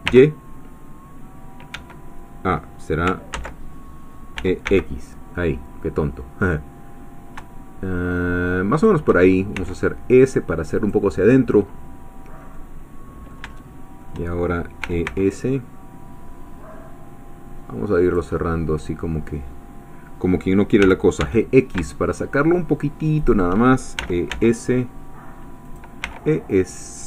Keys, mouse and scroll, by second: 1.8 Escape, 3.6 ctrl+z, 4.6 e, 5.2 x, 8.8 shift+click, 9.6 s, 10.8-12.5 drag, 12.5 middle click, 13.6-14.6 shift+middle drag, 15.0 s, 18.0 click, 18.4 middle click, 20.8 g, 21.2 x, 23.2 shift+click, 24.0 e, 24.3 s, 25.7 click, 26.0 e.